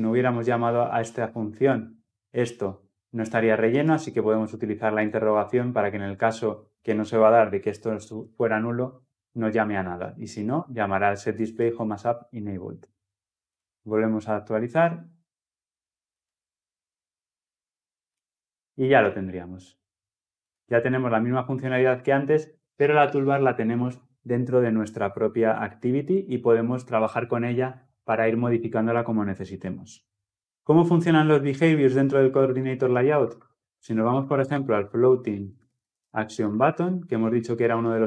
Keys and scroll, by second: 13.4 ctrl+F10.